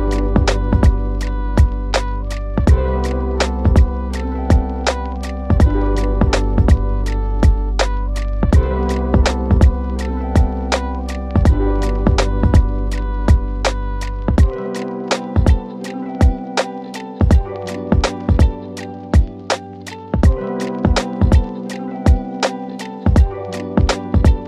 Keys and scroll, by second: 0.0 shift+Page_Up, 0.7 Escape, 4.0 F3, 4.3 Escape, 7.7 ctrl+z, 10.1 ctrl+q.